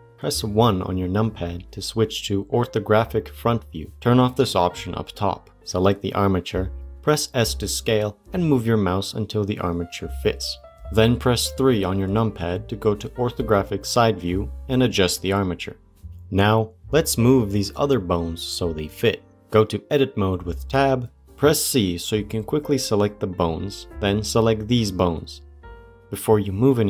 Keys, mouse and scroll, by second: 0.4 KP_1, 5.9 click, 6.7 s, 11.1 right click, 11.1 KP_3, 14.4-15.4 scroll down 1, 15.9 g, 18.7 click, 19.4 Tab, 21.1 c.